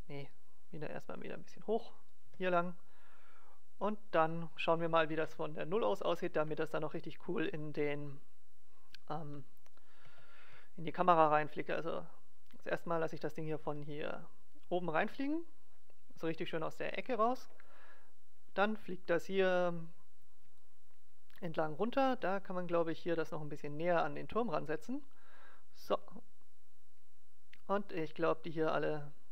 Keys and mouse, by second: 1.0-2.1 drag, 2.2 g, 2.7 click, 3.7 click, 5.3 KP_0, 9.1-11.5 right drag, 10.5 g, 13.4-14.5 drag, 13.6 g, 14.5 right click, 16.9-18.7 drag, 21.7-23.5 right drag, 22.1 g, 24.5-26.3 drag, 27.7-29.3 right drag, 27.9 g.